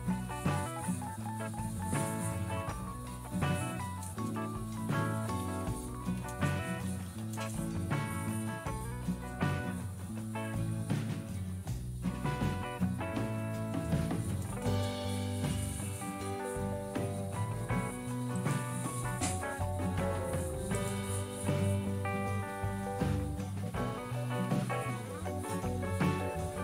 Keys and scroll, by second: 3.5-7.7 typing, 13.8 typing, 23.9 typing, 25.5-26.6 typing.